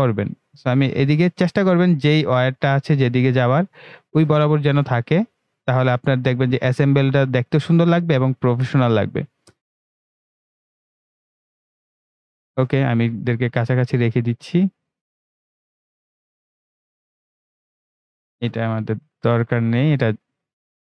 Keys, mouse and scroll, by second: 19.3 Delete.